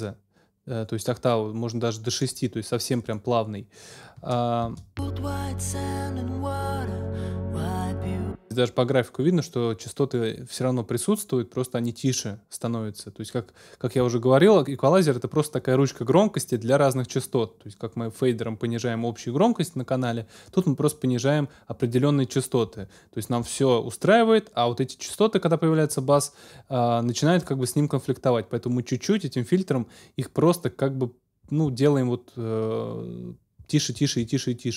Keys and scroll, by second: 4.6 space, 8.0 space.